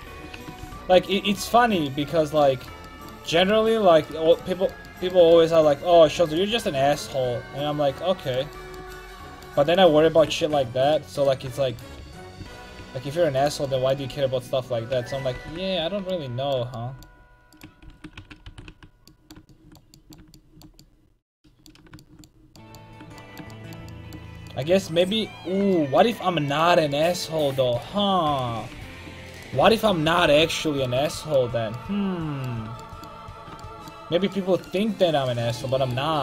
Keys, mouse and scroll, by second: 0.0 ctrl+x, 0.3 a, 0.6 ctrl+t, 4.1-5.1 right drag, 5.1 middle click, 5.9 ctrl+x, 6.3 click, 6.5 ctrl+x, 6.9 a, 7.7 click, 10.0 click, 10.1 ctrl+x, 10.4 a, 12.0 ctrl+z, 12.4 ctrl+z, 12.8 ctrl+z, 13.5-15.3 drag, 14.1 ctrl+x, 14.9 a, 15.3 ctrl+t, 15.8 a, 17.5-18.7 drag, 17.9 ctrl+x, 18.2 a, 18.5 ctrl+t, 18.7 a, 19.2 middle click, 20.1 middle click, 26.5-28.8 right drag, 28.8 ctrl+x, 29.6 ctrl+x, 30.0 a, 30.3 ctrl+t, 30.5 a, 30.6 click, 30.8 middle click, 35.1 middle click.